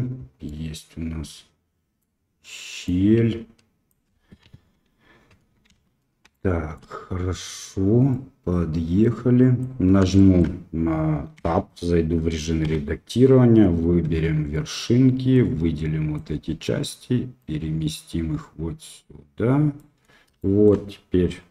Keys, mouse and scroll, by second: 0.4-2.0 middle drag, 2.9 click, 4.4 KP_1, 5.6 shift+z, 6.3-6.7 shift+middle drag, 8.1-9.6 drag, 10.1 shift+middle click, 11.3 Tab, 12.6 1, 12.6 2, 14.0 1, 15.9 click, 17.3-19.8 drag, 20.4 shift+middle click.